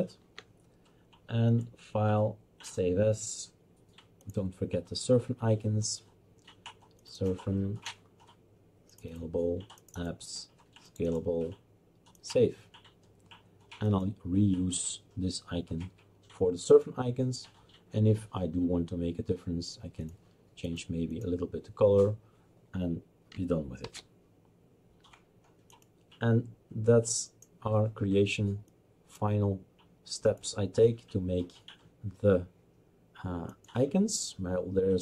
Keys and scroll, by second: 23.8 ctrl+shift+s.